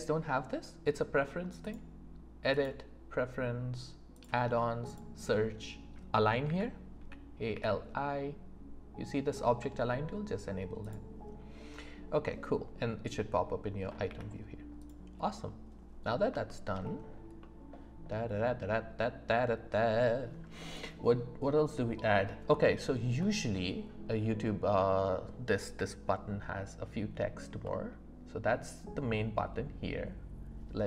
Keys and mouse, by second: 1.6-2.7 drag, 14.1 n, 14.7 click, 15.2 middle click, 16.4 shift+middle drag, 17.4-18.9 middle drag, 23.2-24.4 middle drag, 27.6 middle click.